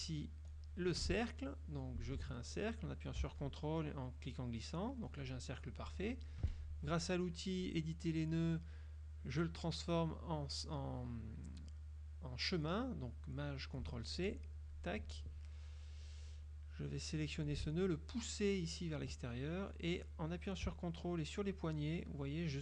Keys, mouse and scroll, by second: 2.4 ctrl+z, 3.5-5.4 ctrl+drag, 6.6 F2, 7.8 click, 14.7 click, 17.2-19.1 drag, 21.6 ctrl+click, 22.3 ctrl+click.